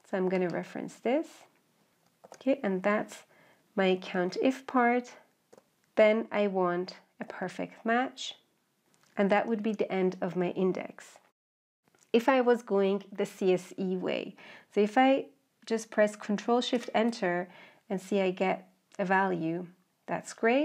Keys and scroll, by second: 16.4 ctrl+shift+Return.